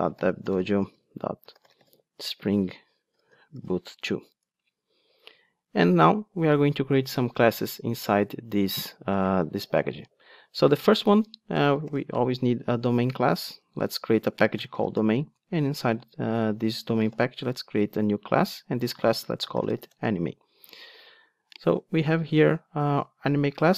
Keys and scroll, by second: 12.0 super+n.